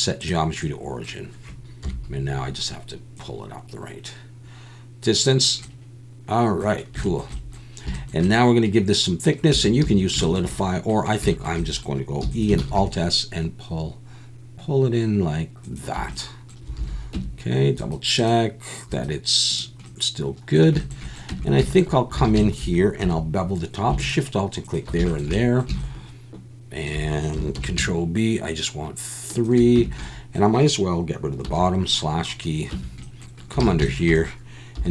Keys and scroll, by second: 1.8 KP_1, 9.5 Tab, 9.8 a, 12.2 e, 12.6 alt+s, 16.8 alt+a, 17.1 Tab, 21.3 Tab, 22.2 alt+a, 23.0 2, 27.6 ctrl+b, 29.8 Tab, 31.5 /, 32.7 Tab, 33.6 alt+a, 34.8 3.